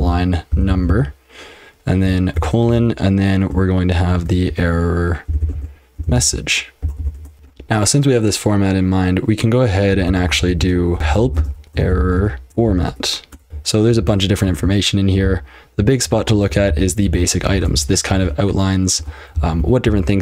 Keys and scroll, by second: 0.0-2.7 typing, 4.1-7.7 typing, 9.9-20.2 typing, 19.0 ctrl+[.